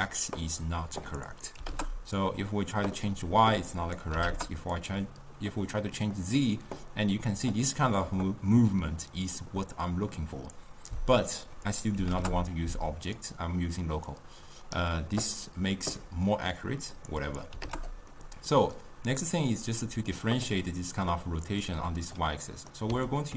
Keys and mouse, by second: 11.8-13.4 drag, 14.2-18.2 drag, 18.2-19.4 middle drag, 19.4-22.4 drag, 22.4-23.3 middle drag.